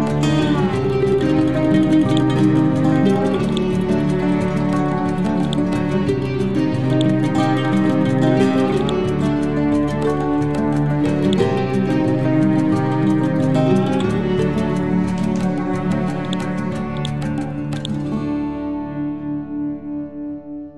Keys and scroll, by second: 9.9 ctrl+g, 17.4 e.